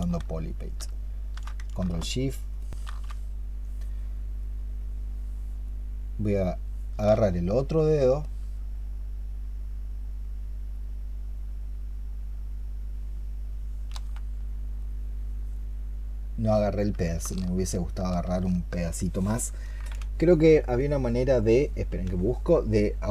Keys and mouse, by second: 0.7 shift+click, 2.5 ctrl+shift+click, 7.4 ctrl+shift+click.